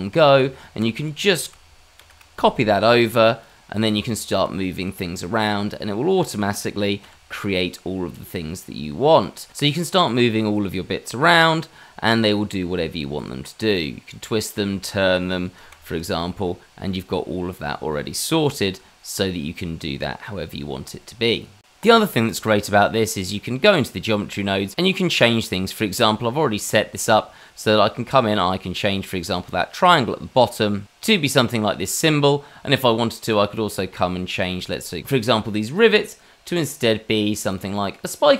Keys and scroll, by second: 0.3 Tab, 2.0 shift+d, 3.8 Tab, 7.0 g, 11.3 g, 15.6 ctrl+t, 18.4 g.